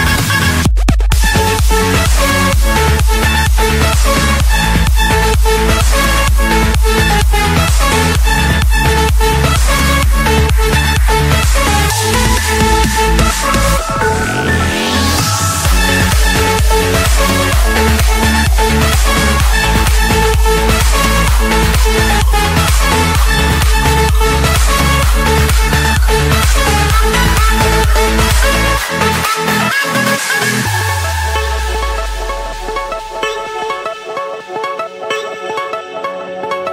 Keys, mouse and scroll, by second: 0.8 typing, 1.7 Return, 2.9-4.0 middle drag, 4.6 click, 5.5 click, 6.0 scroll down 1, 6.3-7.1 scroll up 16, 7.8 click, 8.7 click, 9.4 click, 9.7-10.6 scroll down 16, 10.6-11.5 scroll up 5, 11.5 click, 12.4 click, 13.9 click, 14.1-15.2 scroll down 14, 15.2-15.8 scroll up 2, 16.7 click, 17.5 click, 17.7-18.8 scroll, 18.9 Escape, 21.1 middle click, 21.1 middle click, 21.8 middle click, 24.6-25.6 typing, 27.1 Return, 30.1 click, 31.6-33.5 typing, 32.0 Return, 34.2 Return, 34.9 Return, 35.6 Return.